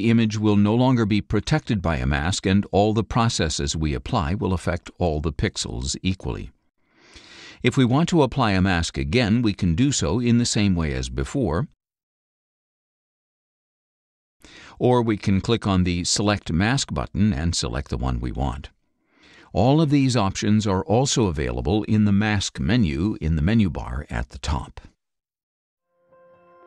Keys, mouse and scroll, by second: 1.4 scroll up 1, 2.2 scroll up 1, 8.5 click, 10.2-14.0 drag, 14.7 click, 18.3 click, 19.7 click, 20.7 click, 21.8 click, 23.5 scroll up 1, 24.2-24.6 scroll down 1.